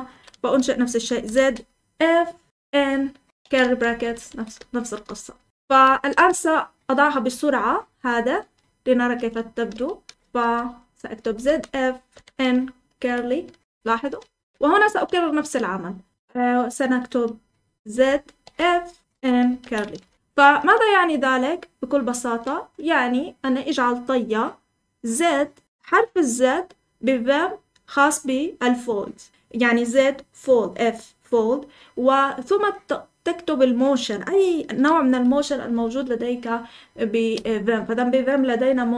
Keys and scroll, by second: 0.0-1.3 typing, 2.6-6.2 typing, 7.4-14.9 typing, 17.8-19.5 typing, 19.9 Escape, 35.2 Escape, 35.6-37.2 k, 37.3-38.6 j, 38.6 k.